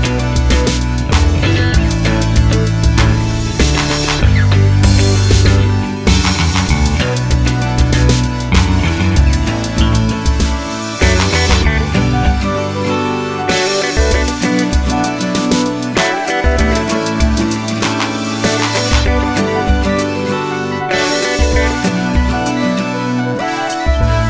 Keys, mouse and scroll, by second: 0.1 scroll down 1, 0.5 scroll up 2, 0.7-1.5 scroll down 2, 1.5-2.1 scroll down 1, 2.4 click, 3.5 click, 4.6 click, 4.8-7.1 drag, 5.7 Return, 10.4 middle click, 10.7 scroll up 2, 11.3 click, 11.4-13.0 shift+middle drag, 13.0 click, 14.4 click, 15.7 click, 17.7 click, 19.2 click, 19.3-19.6 scroll down 1, 19.6 middle click, 20.3 click, 20.4-21.3 scroll up 1, 21.3 click, 22.3 click, 23.4 click, 23.6-24.2 middle drag.